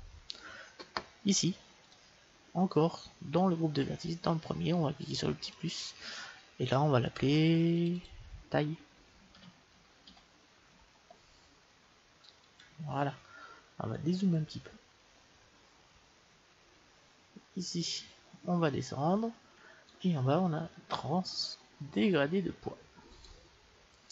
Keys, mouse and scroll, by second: 1.8-9.9 drag, 10.8 l, 13.5-16.9 middle drag, 17.8-19.7 drag, 23.1-24.1 drag.